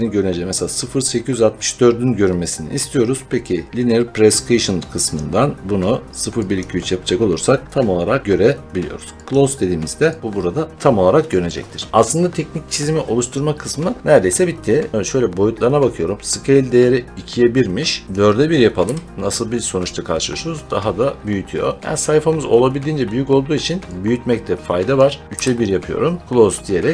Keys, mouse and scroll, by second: 5.1 click, 6.5 click, 9.2 click, 10.1 click, 14.9 click, 18.0 click, 18.7 4, 20.4 middle click, 20.5 middle click, 20.5 middle click, 21.8 middle click, 23.1 middle click, 24.8 click, 25.2 3, 26.2 click.